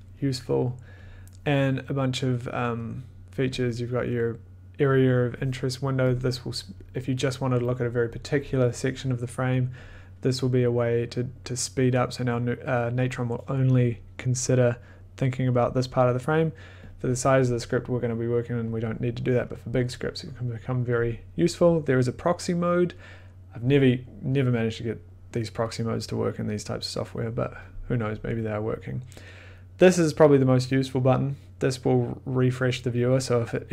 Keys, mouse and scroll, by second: 3.6 click, 5.7 click, 6.1 click, 10.1 click, 11.8 click, 16.8 click.